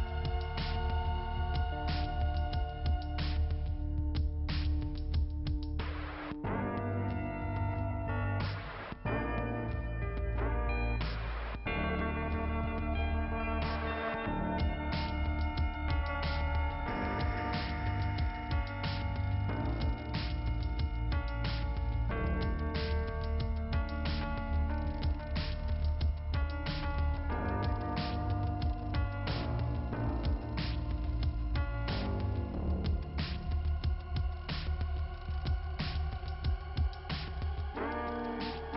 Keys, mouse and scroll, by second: 1.2 click, 1.5 click, 6.5 click, 7.6 click, 9.7 click, 9.8 click, 10.3 click, 10.8 click, 13.1 click, 13.1 click, 13.7 scroll up 1, 14.2 click, 15.6 click, 15.7 click, 16.5 click, 17.5 click, 18.8 click, 19.5 click, 21.7 click, 22.5 click, 24.1-24.5 scroll up 1, 25.0 click, 26.6-27.0 scroll down 1, 27.0 click, 28.3 click, 29.1 click, 29.7 scroll down 2, 31.1 scroll down 2, 31.2 click, 32.0 middle click, 33.0 click, 34.6 click, 36.7 click, 37.8 click, 38.4 click.